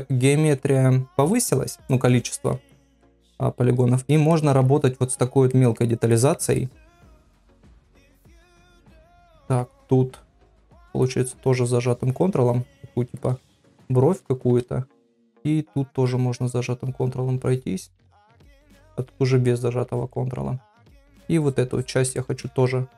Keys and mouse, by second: 0.6-1.1 ], 1.7 shift+], 1.9 shift+click, 3.0 ctrl+middle click, 3.8 shift+click, 4.3 middle click, 5.0 shift+click, 5.5 ctrl+middle click, 6.1 middle click, 6.6 ctrl+middle click, 7.0 middle click, 7.4 ctrl+middle click, 8.2 [, 8.3 [, 9.2 middle click, 9.8 middle click, 11.1 ctrl+click, 11.4 ctrl+click, 12.4 ctrl+click, 14.0 shift+click, 15.0 middle click, 15.9 ctrl+click, 16.1 ctrl+click, 17.6 click, 18.5 click, 19.5 middle click, 20.1 middle click, 21.1 ctrl+click, 21.4 ctrl+click, 21.7 ctrl+click, 22.2 ctrl+middle click.